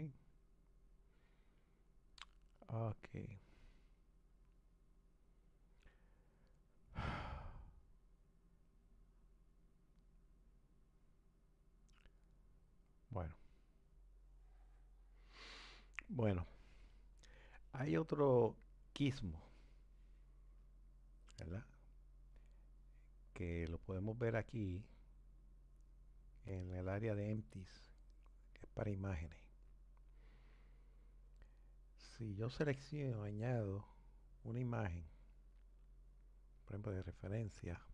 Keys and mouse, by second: 13.1 click, 14.0 Delete, 25.4-28.4 drag, 37.7 click.